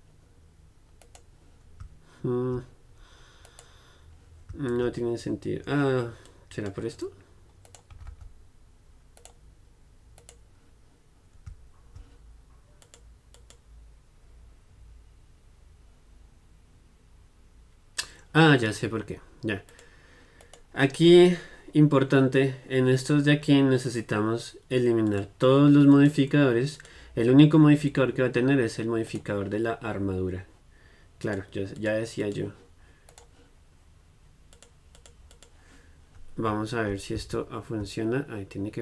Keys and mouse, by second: 6.4-8.4 drag, 7.8-13.0 right drag, 13.0-29.2 drag, 20.5-25.2 right drag, 29.2-31.3 right drag, 31.3-33.2 drag, 33.2-37.3 middle drag.